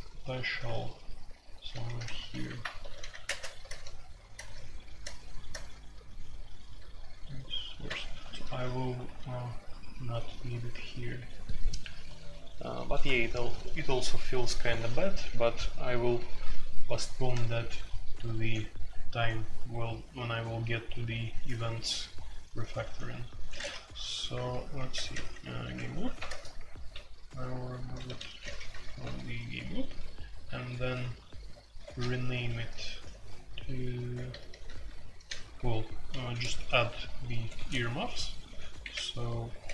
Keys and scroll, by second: 0.5-2.8 typing, 3.2 alt+n, 3.6 alt+n, 4.3 alt+n, 5.0 alt+n, 5.5 alt+n, 7.9-9.5 typing, 23.5 typing, 24.7-30.8 typing, 26.2 alt+n, 31.8-33.6 typing, 34.9-36.1 typing, 37.5-39.7 typing.